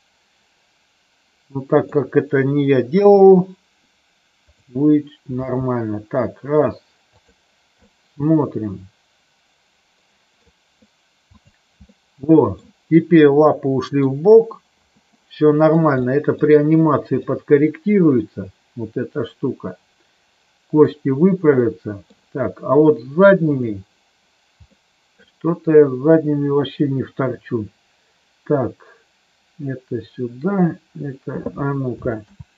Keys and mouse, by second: 2.9 KP_3, 5.4 g, 7.1 click, 7.8-10.4 middle drag, 11.3 click, 11.9 middle click, 13.5 middle click, 15.1 middle click, 16.0 middle click, 17.3-20.8 middle drag, 21.6 middle click, 23.5 click, 24.6 middle click, 32.3 ctrl+z.